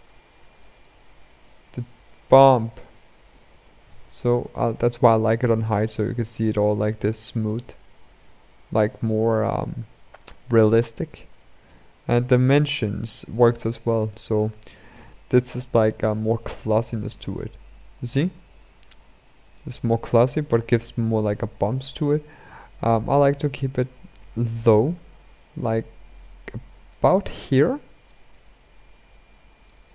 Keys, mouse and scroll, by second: 0.3-2.5 shift+middle drag, 2.5-4.9 drag, 5.3-6.7 scroll up 6, 6.7-7.2 scroll up 2, 7.2-10.2 shift+middle drag, 11.6-13.2 drag, 13.2-14.1 scroll down 4, 14.1-15.5 shift+middle drag, 15.5-17.0 scroll up 4, 17.0-18.2 drag, 18.2-19.3 scroll down 7, 19.3-19.8 shift+middle drag, 19.8-20.1 scroll up 3, 20.1-22.7 middle drag, 22.7-26.0 drag, 27.4-29.9 shift+middle drag.